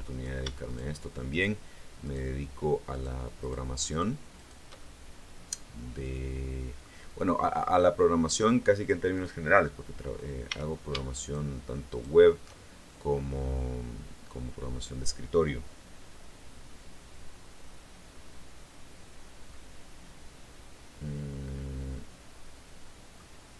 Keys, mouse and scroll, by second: 0.0 right click, 0.6 shift+right click, 1.2 shift+right click, 1.9 shift+right click, 2.8 shift+right click, 3.3 shift+right click, 3.8 shift+right click, 4.2 shift+right click, 4.6-6.8 shift+middle drag, 9.0 click, 9.6-10.0 scroll up 1, 10.4 a, 11.1 alt+shift+right click, 11.8 alt+shift+right click, 12.7-15.0 alt+shift+middle drag, 17.2-17.7 scroll down 4, 19.4-23.2 middle drag.